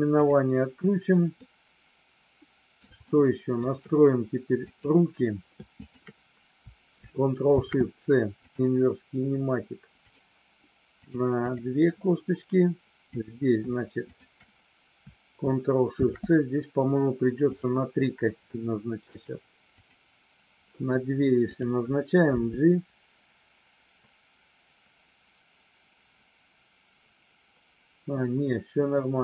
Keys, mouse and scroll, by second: 1.4-3.6 middle drag, 4.6 click, 5.7 shift+click, 7.4 ctrl+shift+c, 10.0 click, 11.4 click, 13.0 click, 14.1 shift+click, 19.1 click, 21.4 click, 22.2 g.